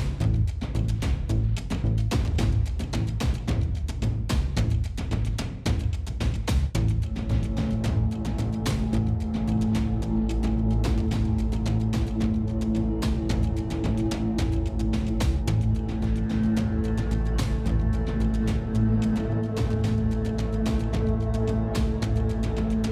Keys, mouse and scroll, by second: 0.2-1.8 drag, 1.8 s, 2.9-4.6 middle drag, 5.6 middle click, 6.0 click, 6.5 Tab, 6.6 click, 7.0 h, 7.3 Tab, 7.6 click, 8.6 Tab, 8.8 middle click, 10.1 ctrl+KP_1, 10.5 middle click, 11.3 middle click, 11.9-14.2 middle drag, 14.8 middle click, 15.8 KP_1, 16.5 click, 17.0 middle click, 17.2 click, 17.3 middle click, 17.5 middle click, 18.4 click, 18.9 middle click, 19.2 Tab, 19.2 click, 19.9 click, 20.4 a, 20.8-21.8 drag, 22.2 click.